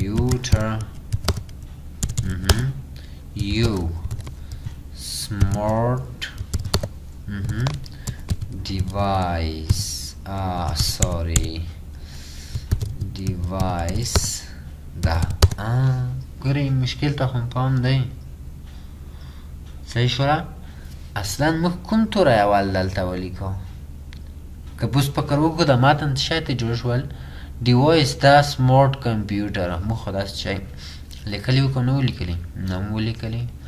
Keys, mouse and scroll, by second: 0.0-6.5 typing, 8.1-16.0 typing.